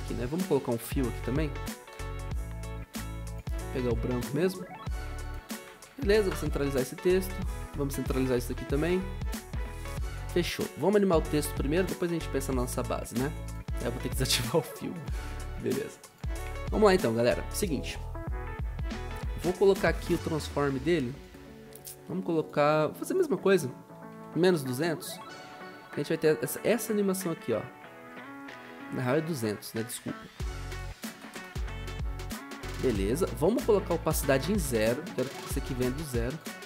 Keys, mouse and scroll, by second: 0.4-2.2 typing, 6.1 ctrl+alt+Home, 8.3 ctrl+alt+Home, 24.5-25.2 typing, 30.4-31.3 typing, 34.0-34.7 typing.